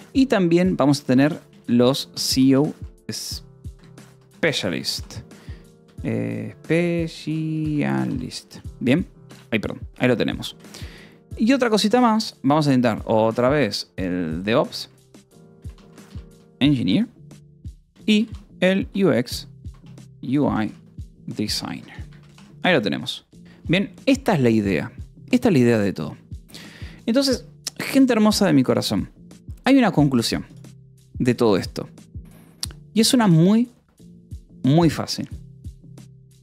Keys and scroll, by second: 1.3-7.1 typing, 5.5 ctrl+s, 7.6 Escape, 8.4 shift+;, 9.2 Return, 9.7 o, 10.4 e, 10.5 space, 13.0 e, 13.2 v, 14.9 Return, 15.5 space, 15.9 g, 16.2 n, 16.6 Return, 17.9-22.1 typing, 22.8 ctrl+s.